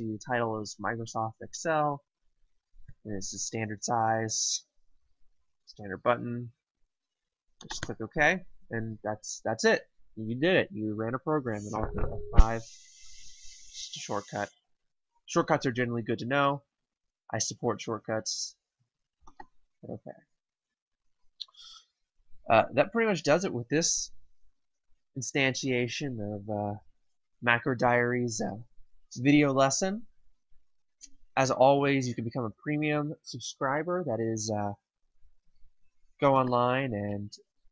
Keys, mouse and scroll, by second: 7.6 click, 11.9 F5, 19.3 click, 36.1 click.